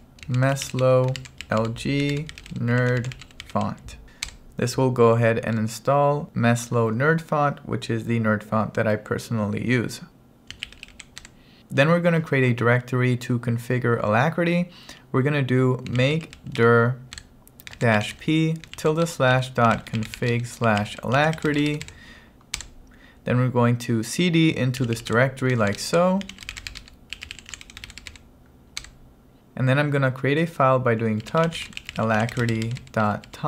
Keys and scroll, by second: 0.0-4.1 typing, 4.3 Return, 10.6 c, 11.3 Return, 15.7-21.8 typing, 22.7 Return, 24.8-29.4 typing, 28.9 Return, 31.3-33.4 typing.